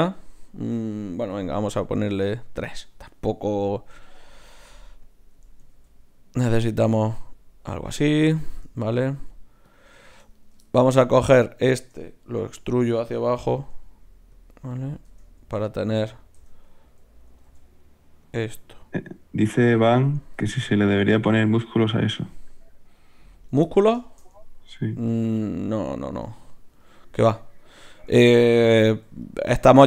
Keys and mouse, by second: 1.4 F6, 4.2-8.4 right drag, 5.7 ctrl+alt+s, 9.1 ctrl+alt+s, 10.4-12.6 drag, 10.4-12.6 right drag, 12.4 e, 15.0 Tab, 16.3 Tab, 17.4 ctrl+alt+s, 19.8 ctrl+alt+s, 20.5-25.5 drag, 21.1 Tab, 22.2 r, 28.7 KP_1.